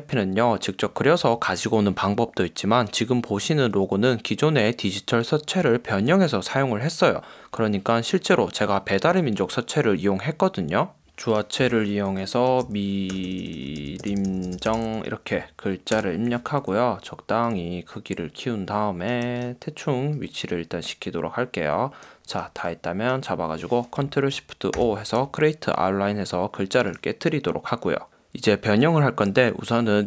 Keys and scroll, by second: 11.0-15.3 typing, 16.0 super+Return, 24.8 shift+super+o.